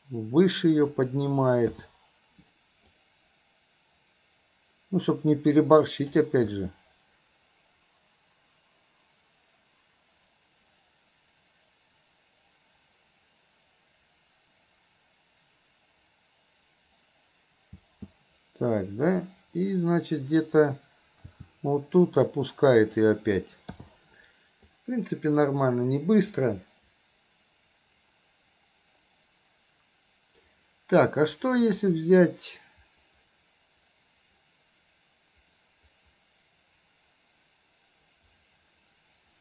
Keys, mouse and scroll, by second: 3.0-6.3 drag, 6.6 space, 17.8 space, 19.3-20.6 drag, 21.3 r, 24.8-39.4 drag.